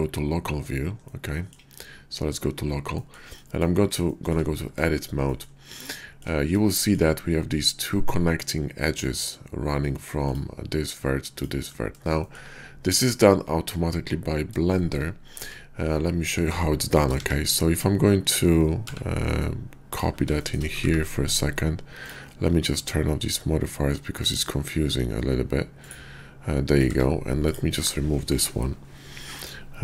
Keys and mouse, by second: 1.1-1.5 drag, 1.7 /, 3.4 drag, 4.6 Tab, 5.3 click, 5.8 shift+click, 10.2 click, 12.2 shift+click, 14.7 shift+click, 15.4 Tab, 16.8 shift+d, 17.2 x, 18.9 x, 20.0 click, 20.8 ctrl+`, 26.8 Tab.